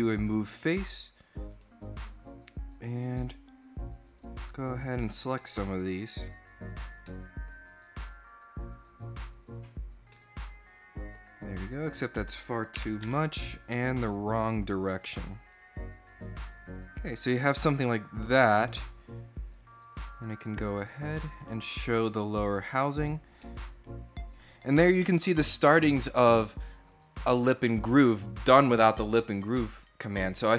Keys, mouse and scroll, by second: 1.3 right click, 2.9 click, 3.8 click, 4.8 click, 5.2 middle click, 6.5 click, 6.8 middle click, 8.5 click, 9.1 click, 9.9-10.9 middle drag, 11.8 click, 12.8 Tab, 13.8 click, 16.3 scroll down 2, 18.3 scroll up 2, 19.9 click, 21.1 right click, 21.9 click, 22.6 click, 23.0 scroll down 2, 23.2 middle click.